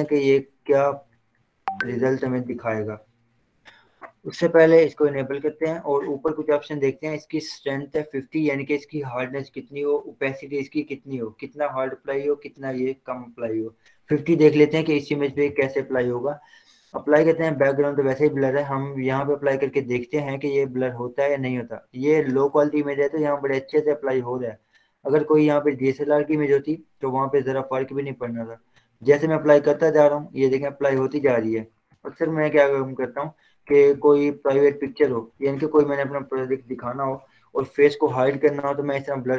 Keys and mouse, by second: 0.6 click, 2.5 b, 5.3 click, 15.3 [, 20.8-22.5 drag, 22.5 ctrl+z, 23.6-31.6 drag, 31.6 ctrl+z, 32.1 ctrl+0, 32.3 z, 33.3-35.2 drag, 35.2 b, 36.3 [, 37.0 [, 38.9 click.